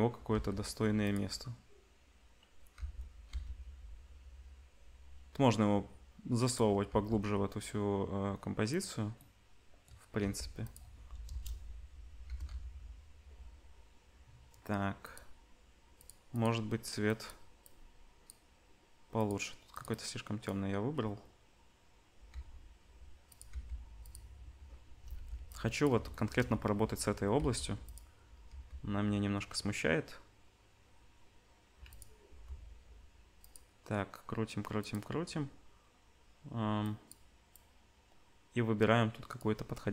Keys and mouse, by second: 2.7 g, 6.9-11.2 middle drag, 6.9 g, 10.2 g, 11.2 KP_0, 12.2 g, 15.9 click, 19.2 click, 22.3 r, 23.5 g, 25.1 ctrl+b, 27.4 g, 28.5 g, 32.2 r, 34.8 click, 35.3-39.9 middle drag.